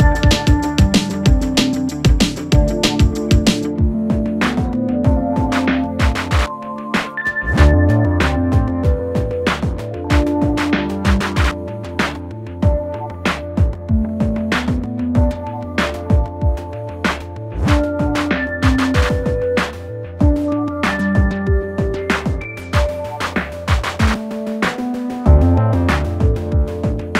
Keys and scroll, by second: 1.2 ], 1.9 ], 3.0 4, 18.1 2, 21.4 shift+f.